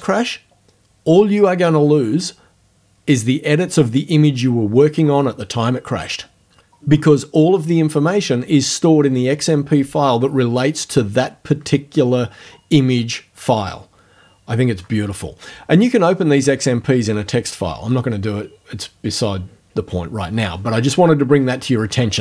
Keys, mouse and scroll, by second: 19.1 click.